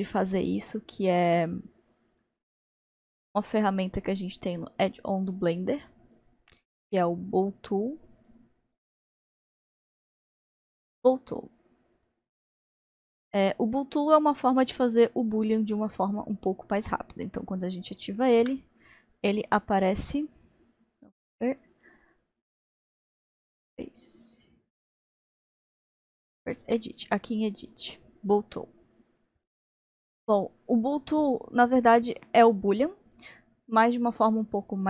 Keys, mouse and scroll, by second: 1.4-9.7 drag, 18.4 n, 21.5 click, 26.6 click, 28.3-34.8 drag.